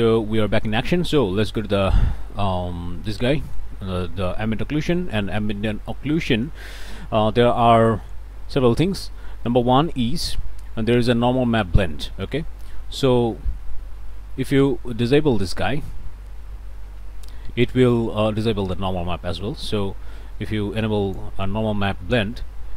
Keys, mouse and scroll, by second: 0.3 click, 1.6-3.7 ctrl+shift+drag, 5.2 click, 5.7 middle click, 8.8-9.3 scroll up 1, 9.4 click, 12.6-14.7 drag, 19.7-21.4 drag.